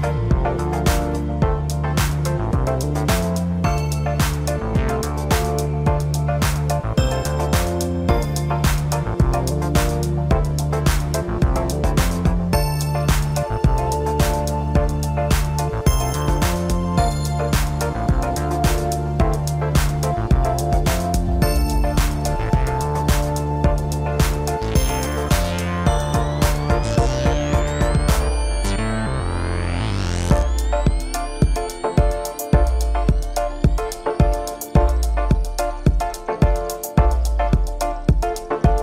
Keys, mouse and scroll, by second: 0.7 e, 2.4-5.1 middle drag, 5.1 click, 5.9 middle click, 6.6 scroll up 1, 7.6 click, 7.8 click, 8.9 e, 11.1 scroll down 3, 11.4-12.7 middle drag, 12.7 drag, 13.6 KP_7, 14.5 KP_Divide, 15.2 scroll down 2, 15.4-17.3 middle drag, 17.3-17.8 scroll up 1, 17.8 click, 18.6 KP_1, 19.9 click, 20.5 scroll up 2, 21.0 scroll down 2, 21.2-22.9 middle drag, 22.9-24.5 drag, 33.5-33.8 scroll up 2, 33.8 scroll down 2, 34.0-37.0 middle drag, 37.8-38.8 drag.